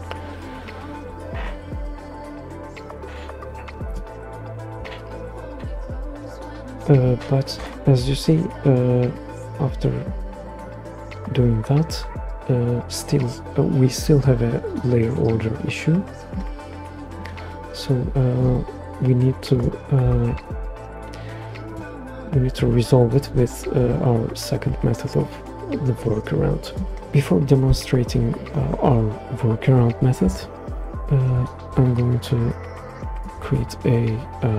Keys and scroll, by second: 7.5 super+Return, 20.3 super+s, 33.4 super+z.